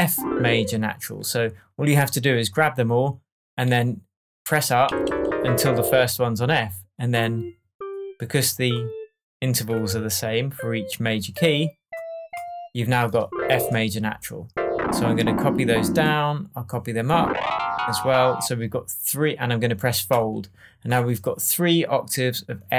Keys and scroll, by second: 4.8 Up.